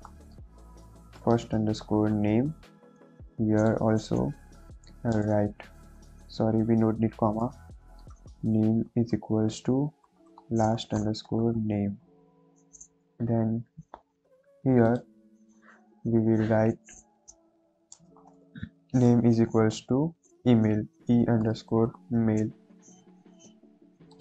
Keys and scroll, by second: 0.0-2.0 typing, 4.4 Right, 4.8 ,, 5.0 space, 5.8 BackSpace, 7.3-11.4 typing, 11.9 Right, 12.0 Down, 12.3 Down, 17.0 Left, 17.7 Left, 17.8-19.4 typing, 20.9-22.0 typing.